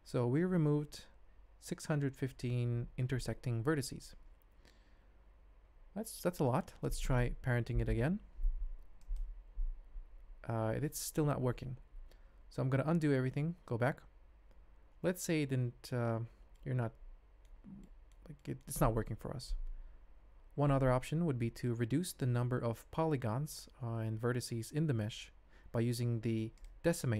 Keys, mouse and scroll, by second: 6.1 Tab, 7.7 ctrl+p, 12.3 ctrl+z, 13.1 ctrl+z, 13.5 ctrl+z, 13.7 ctrl+z, 14.3 ctrl+z, 15.4 ctrl+z, 16.5-17.4 ctrl+drag, 17.8 shift+click, 18.4 ctrl+middle click, 25.0 shift+z, 26.5 click.